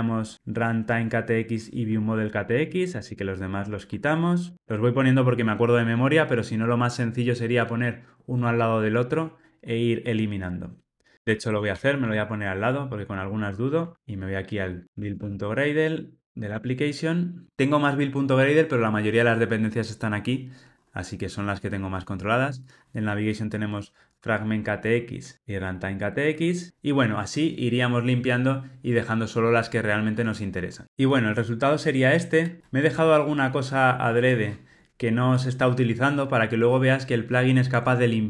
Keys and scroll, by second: 2.1 super+BackSpace, 25.3 super+BackSpace.